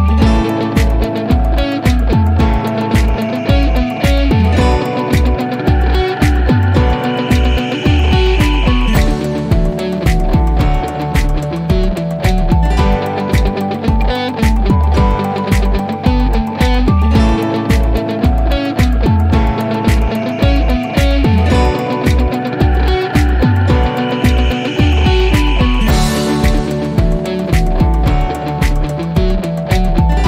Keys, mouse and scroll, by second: 0.2 click, 7.3 click, 9.3 click, 14.6 click, 18.5 click, 22.2 click, 25.5 click, 29.3 click.